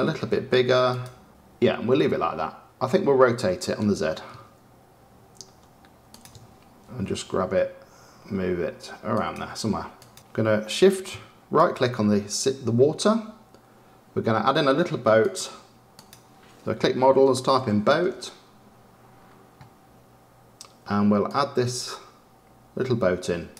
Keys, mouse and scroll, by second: 1.3 click, 3.5 r, 6.8 g, 9.9 click, 10.1-11.5 shift+middle drag, 11.5-15.1 shift+right drag, 15.1-19.0 drag.